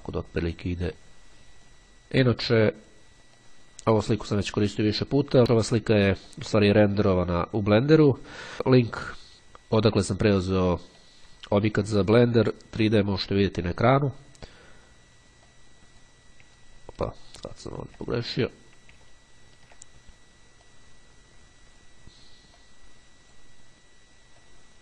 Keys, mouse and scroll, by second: 1.2 click, 3.5-5.3 drag, 10.8 click, 13.0-14.6 drag, 16.0 click, 17.0-17.4 ctrl+scroll down 2, 17.4-19.2 ctrl+scroll up 4, 19.3-19.6 ctrl+scroll down 2, 20.8 click, 22.8-24.0 drag, 24.6-24.8 drag.